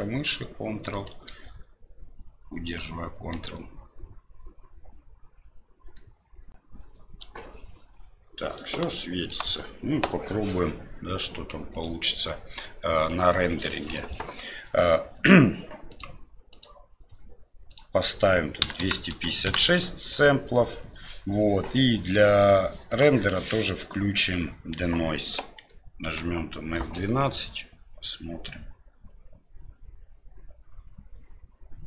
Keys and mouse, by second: 8.9-9.3 shift+middle drag, 12.9 click, 15.9 click, 17.6-20.1 drag, 22.8 click, 26.5 F12.